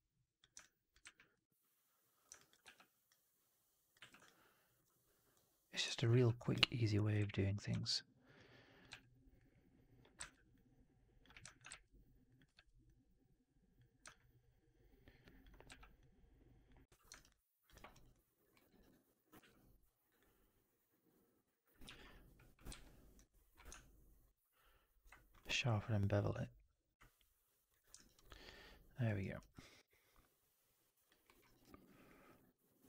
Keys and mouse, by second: 0.5 alt+click, 0.9 w, 2.2 click, 2.3 alt+click, 2.5 r, 3.9 w, 4.1 alt+click, 6.0 r, 7.1 w, 7.6 3, 7.8-8.8 drag, 8.8 r, 10.1 ctrl+z, 11.2 w, 11.3 alt+click, 11.6 shift+x, 12.2 click, 12.4 shift+x, 16.8 4, 17.0 alt+right drag, 17.2-17.5 alt+drag, 17.6 alt+right drag, 17.8 alt+right drag, 18.0 alt+drag, 18.4 alt+middle drag, 18.6 right drag, 18.8 click, 19.3 q, 21.7 4, 22.6 q, 27.9 alt+right drag, 28.0 alt+right drag, 28.2-29.0 alt+drag, 29.1 alt+middle drag, 29.3 alt+right drag, 29.4-31.0 alt+drag, 31.1 alt+middle drag, 31.3 alt+right click, 31.5 alt+right click, 31.7-32.3 alt+drag.